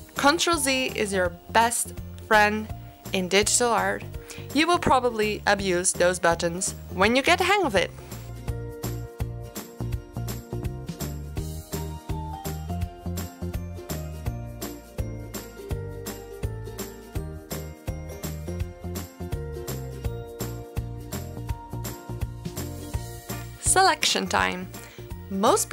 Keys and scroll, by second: 1.8 ctrl+z, 3.4 space, 4.2 ctrl+z, 4.8 ctrl+z, 5.8 space, 5.9 ctrl+z, 6.5 ctrl+z, 7.1 ctrl+z, 7.6 space, 7.9 ctrl+z, 8.8 ctrl+z, 11.3 ctrl+z, 13.4 space, 15.1 ctrl+z, 17.7 space, 19.5 ctrl+z, 20.6 space.